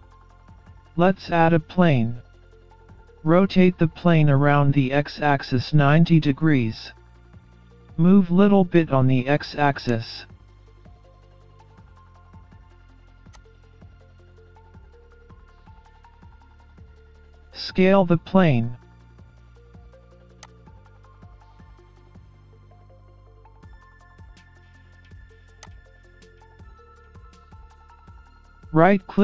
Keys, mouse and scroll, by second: 0.8 scroll up 2, 1.3 middle click, 3.3 r, 7.5 scroll down 3, 7.9-8.2 scroll up 2, 8.2 middle click, 9.9 click, 12.0 middle click, 13.3 click, 14.5 middle click, 17.5 s, 29.0 right click.